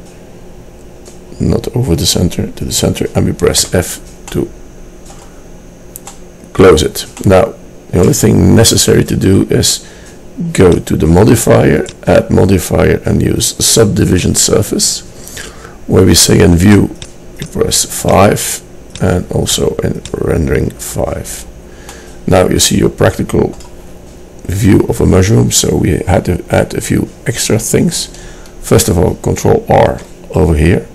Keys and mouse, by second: 3.8 f, 4.6-7.4 middle drag, 10.6-13.9 drag, 13.9-16.8 middle drag, 16.8 click, 19.1-21.0 drag, 21.4 middle click, 29.9 ctrl+r.